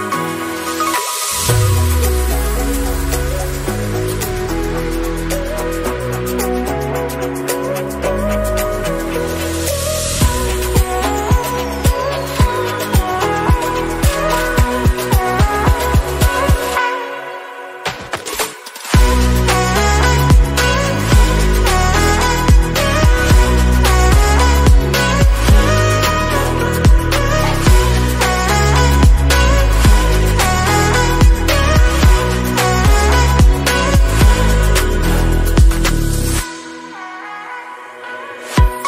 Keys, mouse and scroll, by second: 3.5 s, 8.6 middle click, 9.5-10.1 drag, 10.1 a, 10.7-11.5 drag, 11.5-12.6 scroll up 6, 11.9 drag, 12.6-13.1 shift+middle drag, 13.1 scroll up 1, 13.5 s, 14.7-19.4 drag, 19.4 KP_0, 20.5-26.0 drag, 26.1 drag, 27.7 click, 28.4 KP_0, 28.7-29.0 scroll up 3, 29.4-30.0 drag, 30.6 r, 37.0 click.